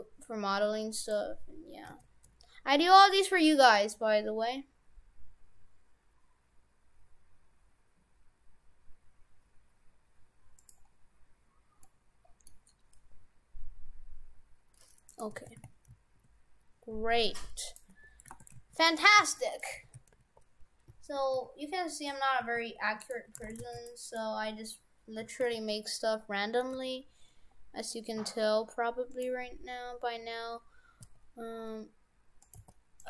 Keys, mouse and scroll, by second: 1.9 s, 11.0-12.2 scroll up 6, 11.9 middle click, 13.9-14.5 scroll down 2, 15.1 right click, 15.4 shift+f, 17.9 Tab, 18.4 shift+f, 19.1 shift+f, 19.9 shift+f, 23.2 Tab, 23.5 shift+f, 24.1 right click, 24.8-25.4 scroll down 6, 25.5 a, 25.9 middle click, 26.8 g, 29.7-31.1 scroll up 3, 31.1 scroll up 2, 31.1 s, 32.6 g.